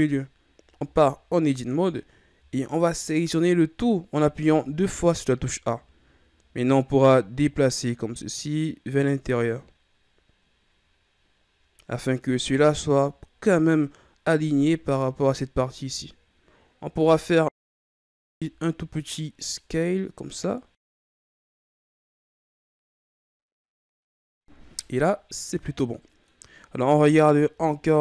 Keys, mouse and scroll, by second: 0.8 Tab, 1.6-4.4 scroll down 6, 4.4 a, 4.8 a, 6.3-7.3 scroll up 1, 7.3-10.3 drag, 17.0 s, 22.0-23.9 scroll down 3, 23.9-26.6 middle drag, 26.6 scroll up 3, 26.9 middle click, 27.6 shift+scroll down 3, 27.9-28.0 middle drag.